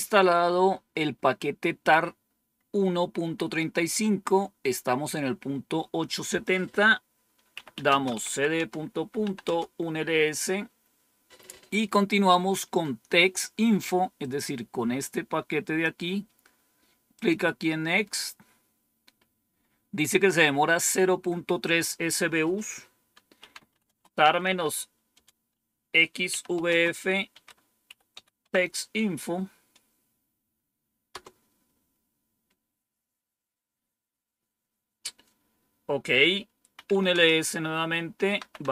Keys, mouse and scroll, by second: 6.2 click, 7.2-9.6 typing, 14.1-15.7 drag, 17.0 click, 21.5 click, 23.0-28.0 typing, 28.3 Tab, 31.0 Return, 36.4-38.7 typing.